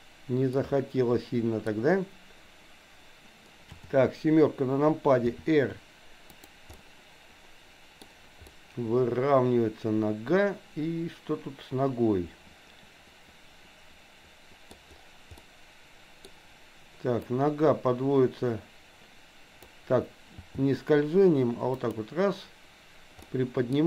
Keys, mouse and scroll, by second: 0.5-1.7 middle drag, 3.8 KP_7, 5.3 r, 6.8-8.0 middle drag, 8.4-14.7 middle drag, 14.7-15.4 scroll down 1, 15.4 middle click, 17.2-19.8 drag, 20.4 g, 23.3 middle click.